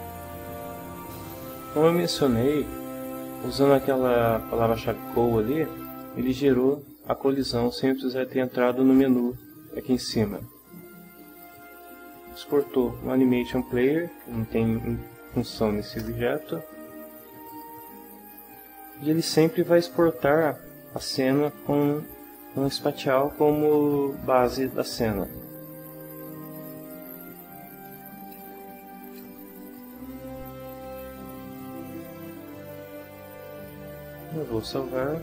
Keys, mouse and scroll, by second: 0.6 Caps_Lock, 5.8 click, 9.0 click, 11.4 click, 12.5 click, 15.5 Delete, 16.0 Return, 17.5 click, 26.6 click, 27.4-29.3 typing, 30.8 middle click, 34.6 ctrl+s.